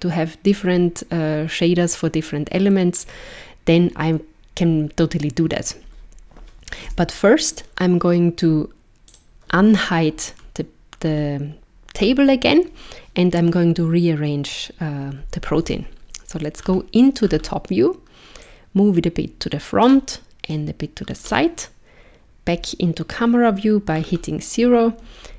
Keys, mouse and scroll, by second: 6.8 KP_0, 9.1 click, 10.4 scroll down 1, 11.0 scroll down 2, 12.0 scroll down 1, 15.6 KP_7, 16.6-17.5 scroll down 8, 18.4 click, 20.5 click, 22.6 KP_0, 24.0-24.6 scroll down 3, 25.0-25.3 scroll up 2.